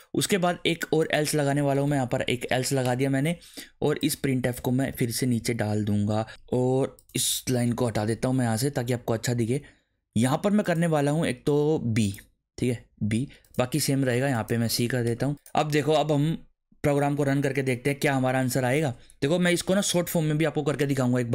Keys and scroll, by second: 1.3-2.5 typing, 2.8 Return, 4.5 alt+shift+Down, 6.1 Up, 7.5 \, 7.9 BackSpace, 12.4 BackSpace, 12.9 b, 15.1 BackSpace, 15.2 c, 15.6 ctrl+s, 18.1 e, 19.2 BackSpace.